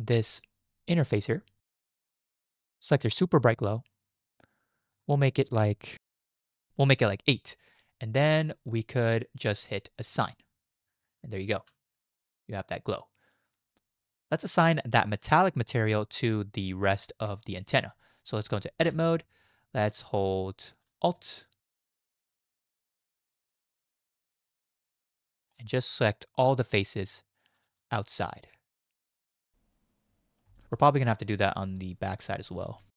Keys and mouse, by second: 3.5-6.4 drag, 11.6 Tab, 15.8 shift+middle click, 18.4 click, 18.8 Tab, 21.1 alt+click, 22.9 alt+shift+click, 23.5 alt+shift+click, 24.1 alt+shift+click, 25.2 shift+click, 28.1 shift+click, 28.6-30.4 middle drag, 30.6 shift+click.